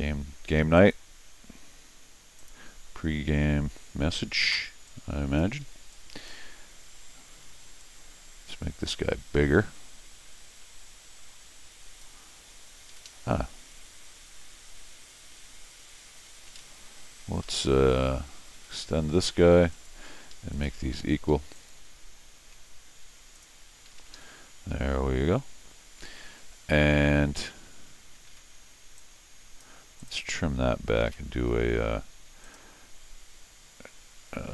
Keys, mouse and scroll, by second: 0.0 Escape, 0.8 click, 2.4 click, 2.8-3.3 scroll down 4, 4.9 click, 5.6 Escape, 5.9 click, 7.8-12.0 drag, 12.9 Escape, 13.0 Escape, 16.0 Escape, 16.3 Escape, 18.6 ctrl+shift+x, 19.7 click, 20.1 Escape, 20.3 Escape, 20.5 click, 21.5 ctrl+click, 23.3 click, 23.9 Escape, 24.1 Escape, 29.0 click, 30.0 click, 30.1 Escape, 30.3 Escape, 31.0 alt+a, 32.4 click.